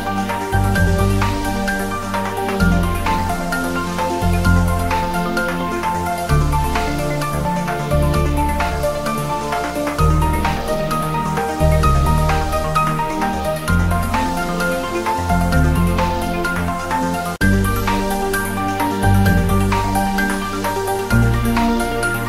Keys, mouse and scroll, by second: 0.3 3, 0.7 scroll up 1, 1.0 scroll down 1, 1.2 scroll up 1, 1.4-1.8 scroll down 1, 1.8-4.7 typing, 2.4 click, 3.7 click, 5.5 Return, 5.8-7.1 typing, 8.5-9.4 typing, 8.5 click, 9.7 scroll up 1, 10.1 scroll down 1, 10.5-10.8 scroll up 1, 10.8-11.4 scroll down 1, 11.7 g, 11.8 Down, 11.9 Left, 12.5 Return, 12.7-13.3 scroll down 1, 13.3 scroll up 1, 14.5 r, 14.8 Down, 15.3 Return, 15.7 scroll up 2, 15.9-16.4 scroll down 2, 16.5-16.9 click, 18.5 scroll down 1, 18.9-19.4 scroll up 1, 19.4 click, 20.6 click, 20.8-21.2 scroll down 1, 21.2 click, 21.7 z, 22.0 click.